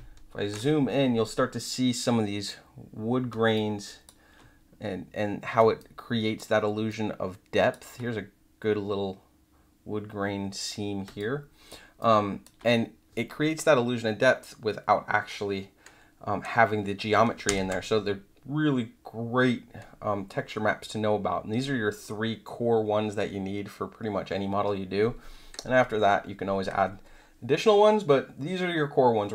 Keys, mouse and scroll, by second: 3.3 space, 3.5 click, 5.5 space, 5.7 click, 6.6 space, 6.8 click, 11.0 space, 11.1 click, 11.9 click, 17.4 ctrl+0.